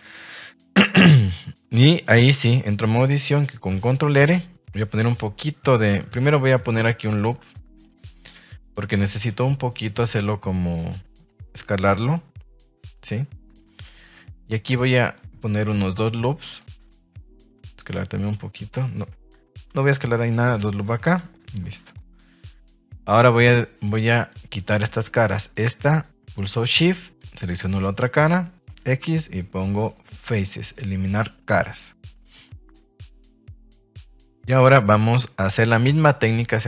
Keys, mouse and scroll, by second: 1.0 shift+middle click, 2.1 Tab, 3.6 ctrl+r, 7.4 ctrl+r, 8.0 Escape, 9.3 s, 11.1 click, 15.4 ctrl+r, 16.8 Escape, 17.5 s, 18.9 Escape, 19.6 ctrl+r, 20.7 Escape, 21.2 Tab, 21.5-21.9 middle drag, 22.2 Tab, 24.1 right click, 25.2 middle click, 27.2 shift+right click, 27.8 middle click, 30.4-32.7 middle drag, 33.5 KP_1, 34.0 KP_3, 34.7 shift+middle click.